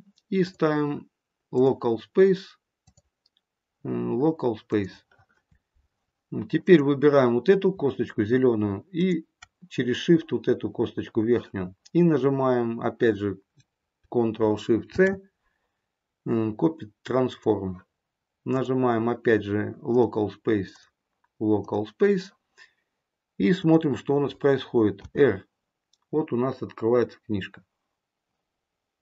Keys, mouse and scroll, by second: 0.4 click, 2.7 click, 6.5 click, 8.9 shift+click, 14.8 ctrl+shift+c, 18.4 click, 20.7 click, 24.9 r.